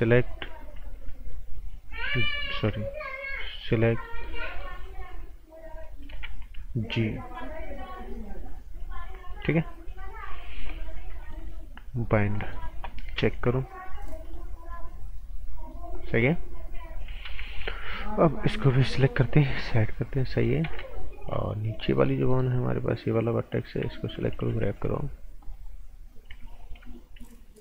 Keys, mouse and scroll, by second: 2.0 b, 3.6 click, 4.0 right click, 5.1 scroll down 1, 5.5-6.1 scroll up 1, 6.1 g, 7.3 click, 11.2 click, 12.2 scroll down 1, 12.3 right click, 12.9 scroll down 1, 13.2 z, 13.8 click, 17.5 scroll up 1, 17.7 right click, 18.4 click, 18.6 right click, 19.2 click, 20.6 ctrl+z, 21.9 alt+right click, 24.4 v, 24.7 click.